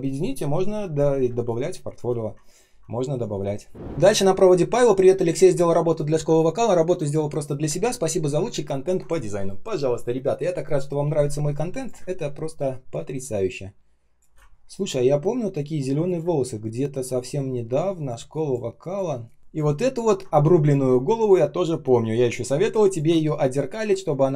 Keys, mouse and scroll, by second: 1.2 space, 1.7 space, 1.7 space, 4.0-4.6 ctrl+scroll up 1, 8.5 ctrl+scroll down 1, 11.9 space, 12.4 space, 12.4 space, 14.4 ctrl+scroll up 1, 15.5-16.1 ctrl+scroll down 1, 16.1 space, 16.6 space, 16.7 space, 19.8 ctrl+scroll down 1, 22.7 ctrl+click.